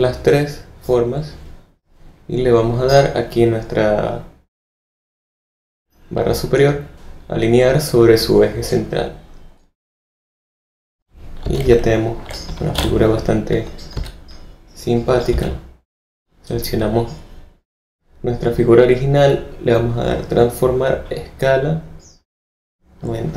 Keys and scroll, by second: 10.9 v, 11.4 z, 12.7 alt+v, 13.3 v, 13.9 z, 15.3 v.